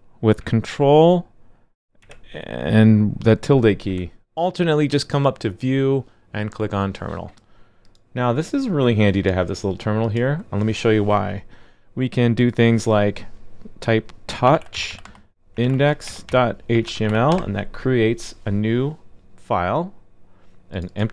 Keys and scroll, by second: 2.0 ctrl+`.